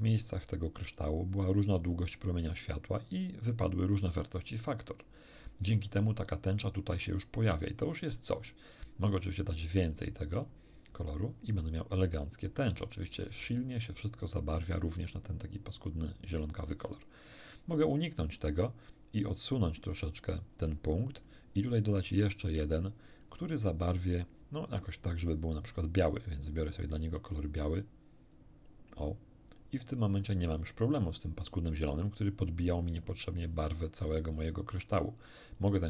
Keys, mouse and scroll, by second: 7.4-7.8 scroll down 1, 8.2 middle click, 9.5-10.6 drag, 10.8 scroll down 2, 11.4 scroll down 2, 12.1-13.0 scroll down 6, 19.4 click, 21.8 ctrl+click, 22.3 ctrl+click, 26.6 click, 27.4 click, 28.3-30.3 drag, 35.5 click.